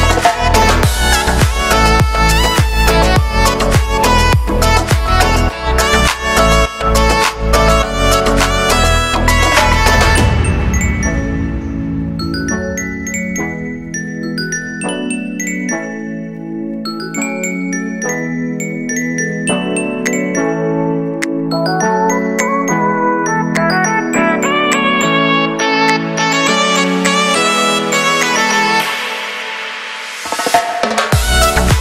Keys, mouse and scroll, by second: 1.6 middle click, 2.1 scroll up 2, 2.3 shift+right click, 2.7 middle click, 2.9-3.3 scroll down 2, 3.3 e, 4.9 middle click, 5.7 shift+right click, 5.9 middle click, 6.2 g, 6.6-7.7 shift+middle drag, 7.7 right click, 7.8 e, 8.8 shift+right click, 9.3 e, 10.8 middle click, 11.1 right click, 11.2 middle click, 11.4 shift+right click, 11.6 middle click, 11.8 e, 13.6-16.2 middle drag, 16.9 middle click, 17.3 right click, 17.5 middle click, 18.0 shift+right click, 18.4 ctrl+z, 18.5 shift+right click, 19.0-21.6 middle drag, 21.6 shift+right click, 21.8 middle click, 22.1 shift+right click, 22.4 ctrl+z, 22.5-22.9 scroll up 1, 22.9 middle click, 23.1 z, 23.4 middle click, 23.6 shift+right click, 23.9 scroll down 2, 24.1 middle click, 24.3 shift+right click, 24.7 ctrl+z, 24.9 middle click, 25.1-25.6 scroll down 1, 25.6 s, 26.8 scroll down 2, 26.9 middle click, 27.4 click, 27.8 g, 28.8 middle click, 29.4-29.9 scroll up 2, 29.9 click, 30.4 right click, 30.7 g.